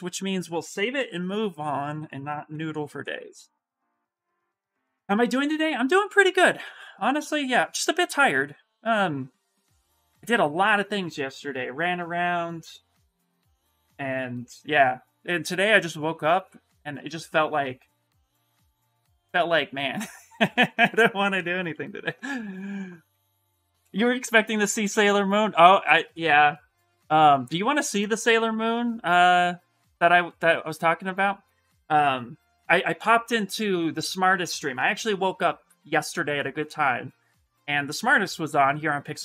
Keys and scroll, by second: 2.3 Return, 2.8 Return.